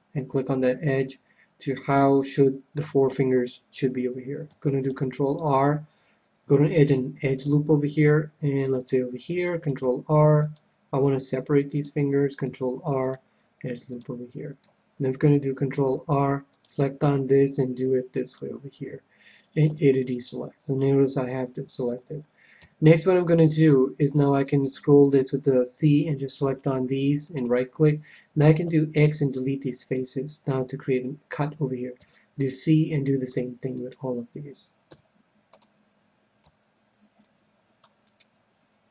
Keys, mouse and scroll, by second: 3.0 a, 4.9 ctrl+r, 8.8-10.6 drag, 9.6 ctrl+r, 10.8 ctrl+r, 11.8-13.6 drag, 12.4 ctrl+r, 13.8 ctrl+r, 13.9-15.6 drag, 15.6 ctrl+r, 18.3-20.1 drag, 19.6 a, 22.5 c, 27.1-29.2 right drag, 28.6 x, 29.3 x, 31.9 c, 33.8-35.6 right drag, 34.8 x, 36.3 c, 38.1-38.9 right drag, 38.8 x.